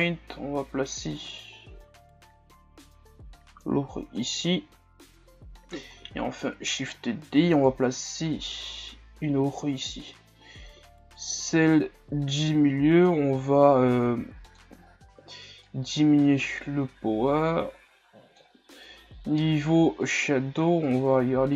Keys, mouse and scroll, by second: 6.4 shift+d, 7.8-21.5 drag.